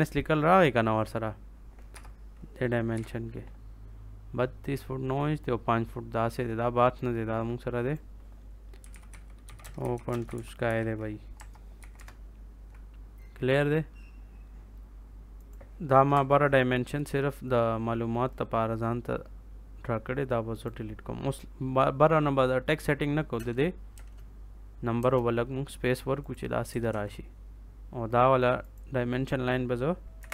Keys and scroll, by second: 1.9 BackSpace, 2.8 9, 8.5-11.7 typing, 11.9 Return, 16.1 BackSpace, 23.3 space, 26.8 ctrl+s, 30.1 Delete.